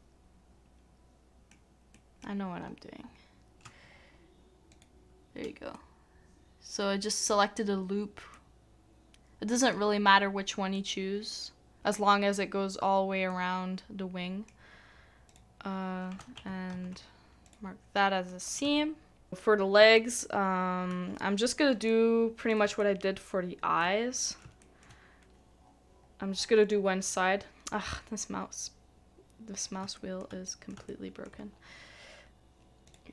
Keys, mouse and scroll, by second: 2.4 scroll up 1, 2.6-2.9 scroll down 1, 3.0 scroll up 1, 3.1 scroll down 1, 3.1-3.6 scroll up 1, 5.7 middle click, 16.4 middle click, 16.7 ctrl+e, 18.3 middle click, 19.3 middle click, 19.9 shift+middle click, 21.9 middle click, 22.8 shift+middle click, 24.1 middle click, 24.6 shift+middle click, 24.9 scroll up 1, 24.9 scroll down 1, 29.8 scroll up 1, 29.9 shift+middle click, 30.4 middle click, 30.9 shift+middle click.